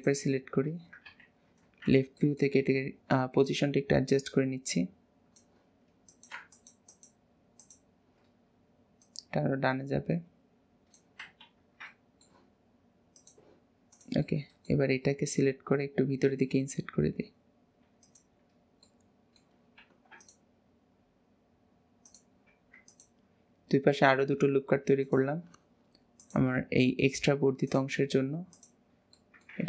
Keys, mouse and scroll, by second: 0.0 alt+shift+click, 1.0 KP_3, 1.5 alt+z, 2.2-3.4 shift+middle drag, 3.4 click, 6.1 click, 6.5 alt+shift+click, 6.9 alt+shift+click, 7.5 alt+shift+click, 9.0 click, 11.5 alt+z, 11.9-13.1 middle drag, 13.1 click, 13.9 click, 14.2-15.5 middle drag, 15.5-16.2 scroll up 2, 16.2 e, 18.9 middle click, 19.8 ctrl+r, 22.5 ctrl+r, 26.2 click, 27.1 click, 27.6 shift+click, 28.5 shift+click, 29.1 middle click.